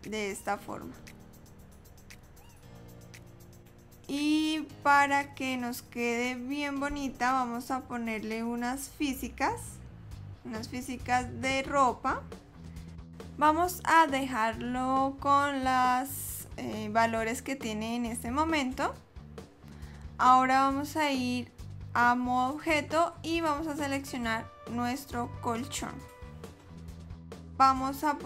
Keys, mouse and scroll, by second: 5.6 click, 9.7 click, 22.4 click, 25.2 click.